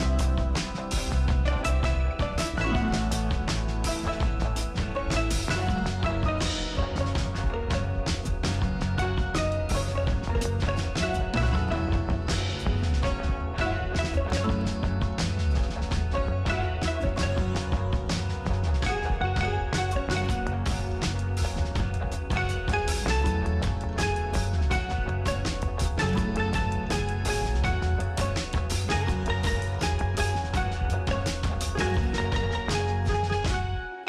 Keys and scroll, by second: 4.0 space, 6.8 space, 10.4 space, 12.5 space, 13.5 space, 29.6 ctrl+alt+z.